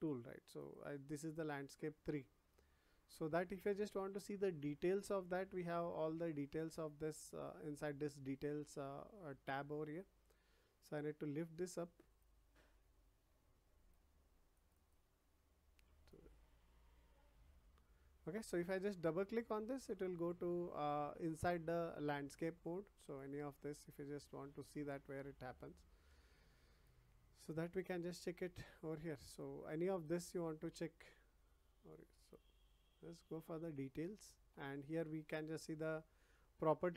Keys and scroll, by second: 26.0 ctrl+z.